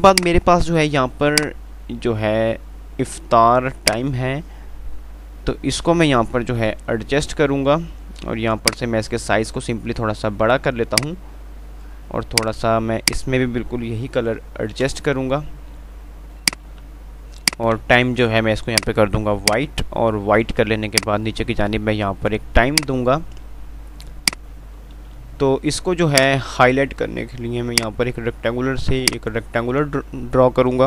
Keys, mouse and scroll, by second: 7.1 Page_Up, 8.9-12.9 drag, 13.3 ctrl+click, 14.6 F11, 17.0 ctrl+r, 17.7-23.7 ctrl+drag, 23.7 F2, 26.4-30.8 drag.